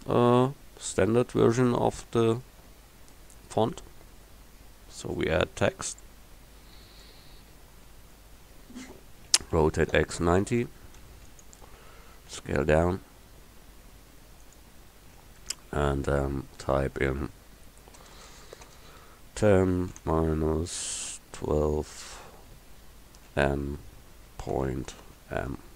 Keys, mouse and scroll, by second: 9.4 r, 12.3 s, 16.2 Tab, 18.1-20.0 typing, 21.4 1, 21.6 2, 23.4 shift+n, 24.5 ., 25.6 m.